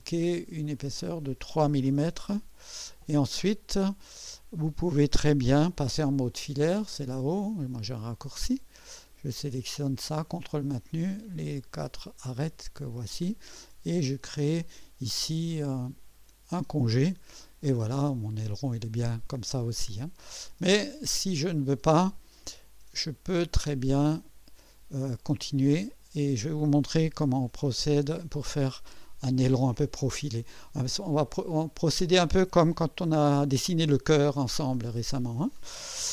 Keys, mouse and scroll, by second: 0.8 click, 1.8-2.5 typing, 3.6 scroll up 2, 4.0-4.9 drag, 7.1 Return, 8.9 click, 10.2 ctrl+click, 11.3 ctrl+click, 11.9 typing, 12.9 ctrl+click, 13.1-13.8 typing, 14.0 click, 15.8 click, 17.1 typing, 17.8-20.4 drag, 21.8 click, 22.4 Delete, 22.5 Delete, 23.8 click, 24.2 Delete, 25.5-26.7 drag, 27.9 scroll up 1, 29.3-29.9 right drag, 30.7-31.1 right drag, 31.3-32.6 drag, 32.1-33.0 typing.